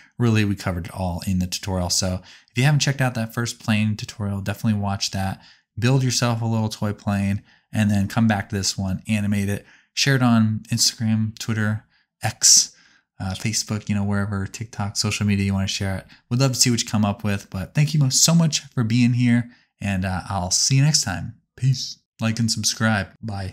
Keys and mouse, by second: 6.8 click, 8.4 click, 9.4 click, 11.2 click, 12.4 click, 16.6 click, 18.2 click, 19.0 click, 21.2 click, 22.4-23.5 drag.